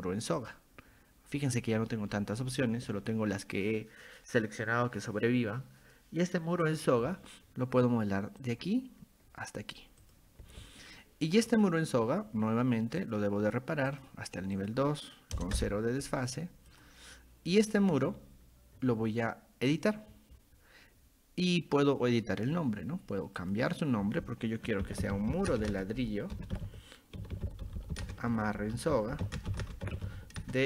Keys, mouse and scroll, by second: 0.4 click, 6.7 click, 8.4 click, 10.0 click, 11.5 click, 13.0 click, 13.9 click, 14.6 click, 16.7 click, 17.5 click, 19.7 click, 23.4 click, 24.6-30.6 typing.